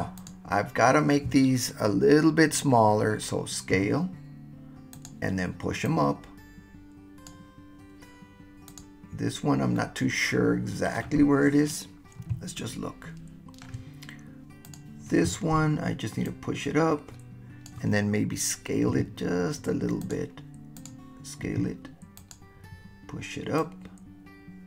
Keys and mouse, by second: 0.3 click, 3.7 s, 4.9 click, 5.9-7.3 drag, 9.7-11.0 middle drag, 12.6-13.7 shift+middle drag, 13.7 shift+drag, 14.7 click, 16.3-17.7 drag, 18.9 s, 20.0 click, 21.4 s, 22.2 click, 23.6-24.6 drag.